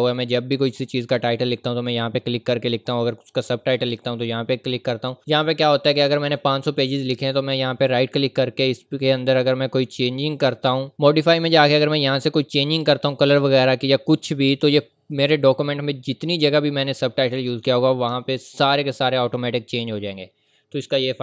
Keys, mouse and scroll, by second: 7.6 right click, 10.3 click, 15.1 click.